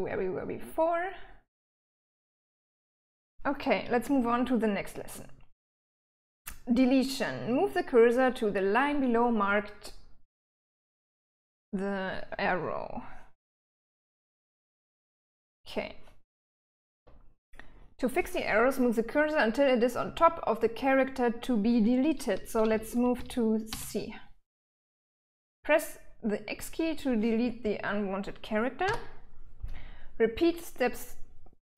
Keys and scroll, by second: 2.8 j, 3.9-6.5 typing, 13.1-15.0 typing, 16.0 l, 16.5 l, 16.6 l, 16.9 l, 22.4 l, 22.6 l, 22.9 l, 23.4 l, 28.6 x.